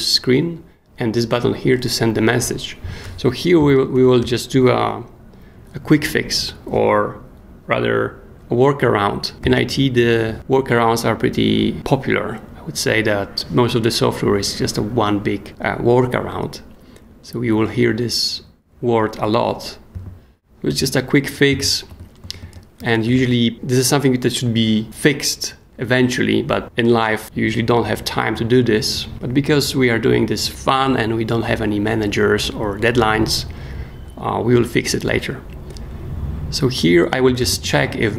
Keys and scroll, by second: 3.6 k, 3.9 shift+o, 4.2 Return, 9.4 shift+9, 19.9-23.6 typing, 27.2 space, 37.0-38.1 typing.